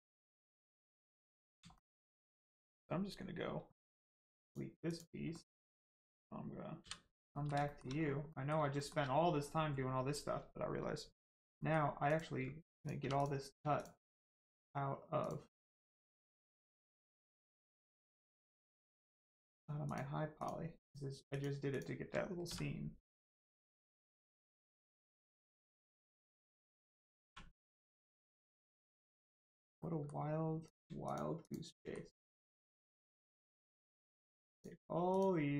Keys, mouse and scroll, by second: 1.3 scroll down 1, 1.7 shift+middle click, 3.9 x, 4.4 click, 5.3 middle click, 5.8-6.7 scroll down 1, 7.3 middle click, 7.6 shift+middle click, 8.3 middle click, 8.3 middle click, 8.7 shift+middle click, 11.1 Tab, 11.5 middle click, 12.0 click, 12.9 3, 14.0 shift+click, 15.5 shift+middle click, 15.7 middle click, 16.5 shift+click, 17.1 shift+click, 18.0 shift+click, 18.3 shift+click, 19.5 shift+click, 19.8 shift+click, 20.3 shift+click, 20.7 shift+click, 22.4 click, 24.2 click, 24.6 middle click, 27.8 click, 28.1 middle click, 30.6 click, 31.0 shift+click, 31.4 shift+click, 31.7 shift+middle click, 32.5 shift+click, 33.0 shift+click, 33.9 shift+click, 34.5 shift+click, 35.1 shift+click.